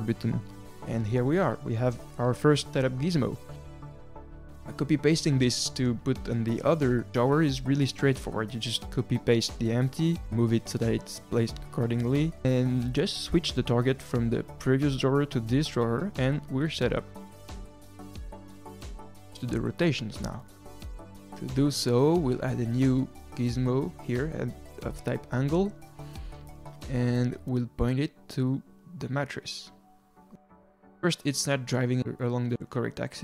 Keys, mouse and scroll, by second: 0.6 drag, 8.8 shift+d, 10.3-12.8 drag, 12.8-13.8 scroll down 1, 13.8 click, 14.3 click, 16.5 click, 19.1 click, 19.8 r, 22.5 shift+s, 24.5 shift+a, 26.7-27.0 scroll up 1, 27.0 middle click, 27.9-28.8 scroll down 4, 28.8 click, 31.0-31.6 middle drag, 31.6 drag.